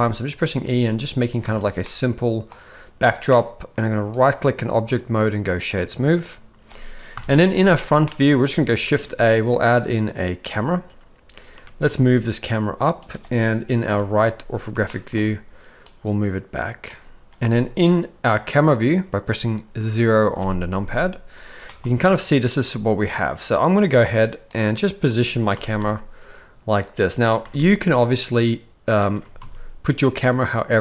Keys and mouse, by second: 0.0-0.6 typing, 1.4 Tab, 1.8-2.5 middle drag, 3.3-3.7 middle drag, 4.3-5.7 right drag, 7.1 KP_1, 8.0-8.4 shift+middle drag, 8.8 shift+a, 11.5 g, 13.9 KP_3, 14.9 shift+middle drag, 15.8-16.8 drag, 20.3 KP_0, 21.7 g, 22.6 g, 24.6-25.2 drag, 25.5 r, 27.4 r, 29.1 r.